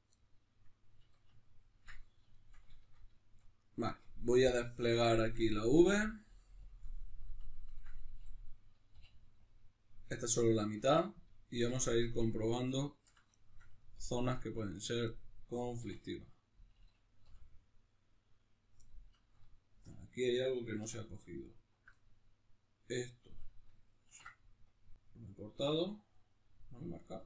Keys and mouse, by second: 0.2-4.4 middle drag, 1.0 a, 4.4-7.5 drag, 7.5-16.1 ctrl+middle drag, 9.0 u, 15.8 3, 16.1-17.2 right drag, 17.2 l, 18.8-21.4 middle drag, 20.8 2, 21.4 alt+right click, 22.0-27.2 middle drag, 24.0 ctrl+e.